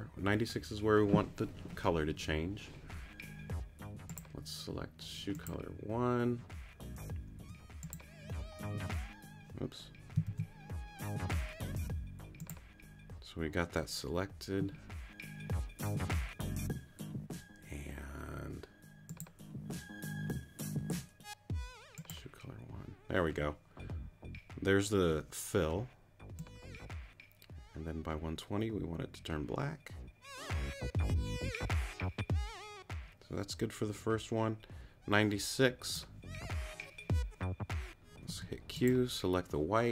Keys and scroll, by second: 7.4 q, 10.3 super+z, 38.3 q.